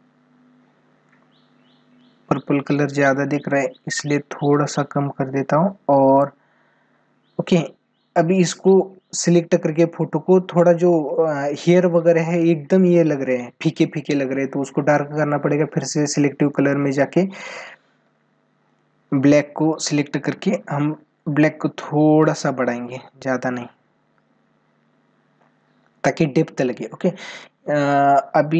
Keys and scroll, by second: 6.8 ctrl+=, 9.4 ctrl+=.